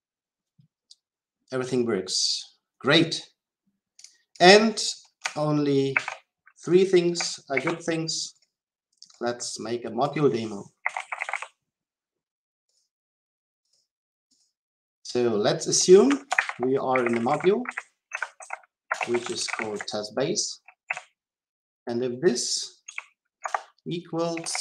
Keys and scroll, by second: 5.8 ctrl+c, 23.3 Return.